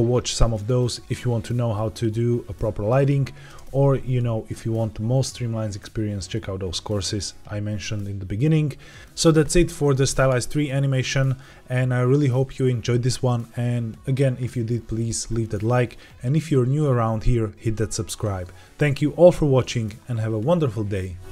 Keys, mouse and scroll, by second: 3.4 space.